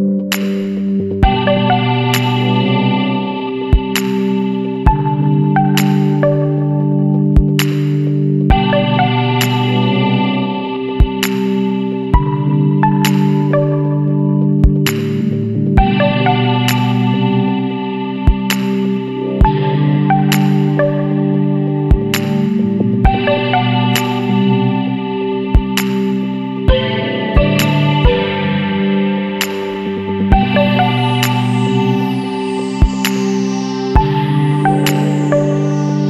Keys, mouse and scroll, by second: 0.7 click, 1.7 Escape, 2.7 click, 4.3 click, 5.2 click, 6.3 KP_7, 6.6 KP_4, 7.3 KP_Enter, 9.1 click, 10.3 KP_7, 10.6 KP_Decimal, 10.9 KP_5, 11.4 KP_Enter, 13.6 click, 15.1 click, 15.6 KP_1, 15.8 KP_Decimal, 16.0 KP_5, 16.6 KP_Enter, 17.8-18.4 scroll down 3, 18.8 scroll down 1, 19.3 scroll up 1, 21.9 click, 22.7 click, 23.9-26.5 middle drag, 24.1-26.5 drag, 25.9 right click, 27.2 Down, 28.3 Left, 29.9 click, 31.6 KP_1, 31.9 KP_Decimal, 32.1 KP_5, 33.7 click, 35.9 click.